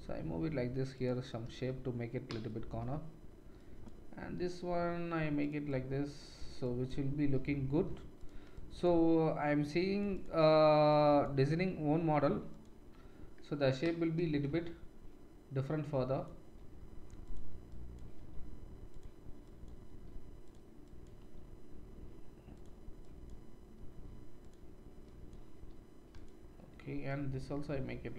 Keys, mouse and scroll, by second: 3.6-5.4 drag, 4.2 g, 5.4 middle click, 5.7-8.3 drag, 7.1 g, 8.3 middle click, 8.6-10.2 drag, 10.2 middle click, 11.0 click, 11.3 g, 12.6-15.9 middle drag, 15.9 click, 16.5 g, 17.3 middle click, 17.7 click, 18.1 g, 19.0 middle click, 19.4 click, 19.8 g, 20.5 middle click, 20.8 click, 21.1 g, 22.6 middle click, 23.0 click, 23.7 g, 24.6 middle click, 25.1 click, 25.5 g, 26.2 middle click, 27.0 click, 27.5 g.